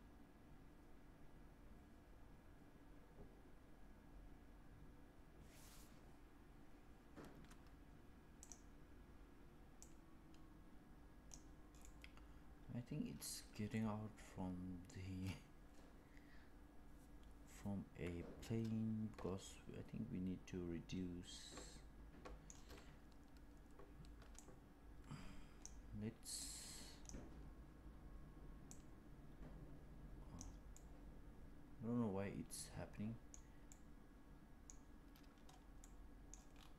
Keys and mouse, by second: 8.5 click, 9.7-11.3 drag, 11.7-22.4 middle drag, 24.3-25.8 drag, 27.7 click, 28.6-30.3 drag, 30.6-33.2 middle drag, 33.6-34.6 middle drag, 35.7-36.3 middle drag.